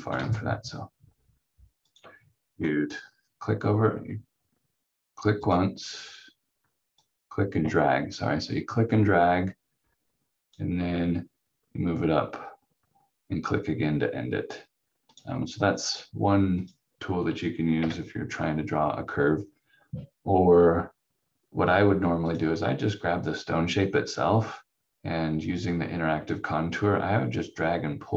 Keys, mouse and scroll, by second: 0.2 ctrl+z, 1.8 click, 15.0 ctrl+click, 17.8 Delete, 22.3 click.